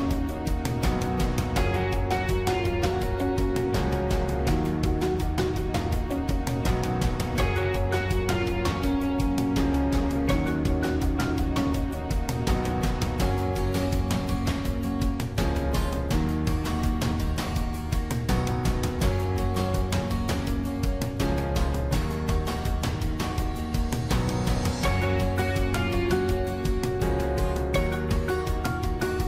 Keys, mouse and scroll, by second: 2.7 ctrl+-, 8.7 ctrl+-, 10.3 ctrl+-, 13.8 ctrl+-, 15.3 ctrl++, 26.0 ctrl+-.